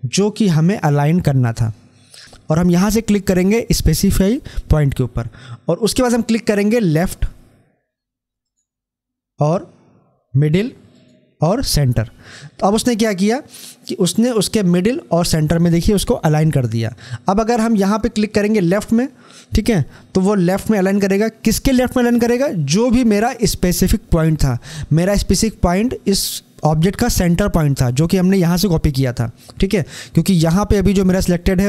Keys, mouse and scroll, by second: 6.8 click, 10.8 click, 18.3 click.